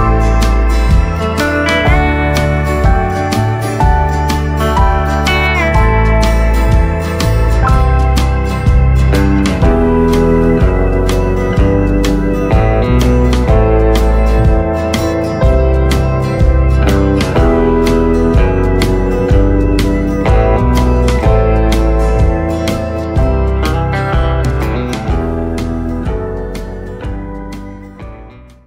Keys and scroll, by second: 3.5 Tab, 4.1 space, 4.6 space, 5.5 space, 6.2 space, 11.7 KP_Decimal, 11.9 KP_7, 12.2 KP_5, 12.5 Return, 14.5 Tab, 15.4 space, 15.8 space, 20.7 space, 20.9 space.